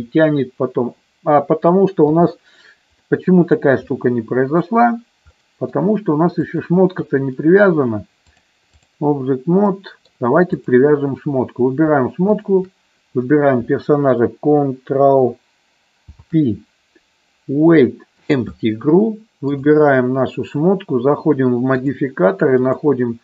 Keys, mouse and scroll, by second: 2.0 KP_3, 3.1 middle click, 4.0 middle click, 5.3 middle click, 6.4 click, 8.3 click, 9.5 middle click, 12.2 shift+click, 15.9 ctrl+p, 21.7 click, 22.7-23.2 drag.